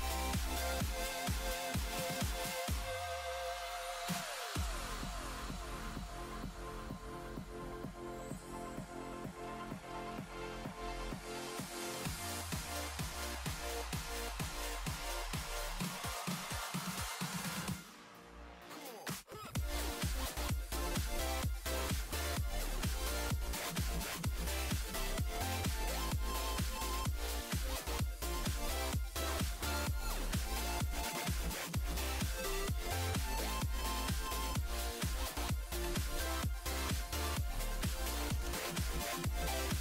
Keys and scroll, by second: 36.1-38.2 typing, 39.6-39.8 typing.